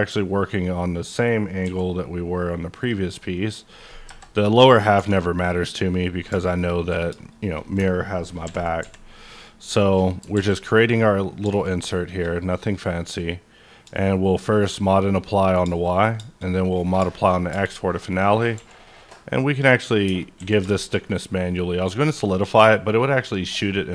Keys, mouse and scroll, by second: 1.0 click, 1.6 c, 2.8 click, 3.5 click, 4.0 KP_Enter, 4.9 3, 5.5 click, 7.3 shift+click, 8.4 ctrl+i, 8.8 x, 9.3 click, 9.7 scroll up 1, 10.0 middle click, 10.3 alt+x, 14.2 shift+click, 14.2 shift+click, 15.4 scroll down 2, 16.6 click, 17.0 shift+middle click, 17.3 scroll up 1, 17.5 Tab, 17.7 middle click, 18.0-18.5 scroll up 2, 18.5 q, 20.0 Tab, 20.4 a, 20.7 shift+middle click, 21.0-23.9 shift+middle drag.